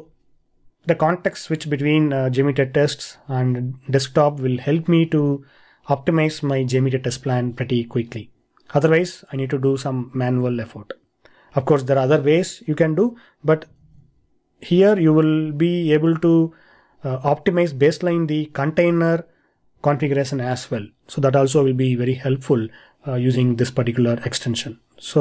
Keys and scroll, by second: 13.8 super+Tab.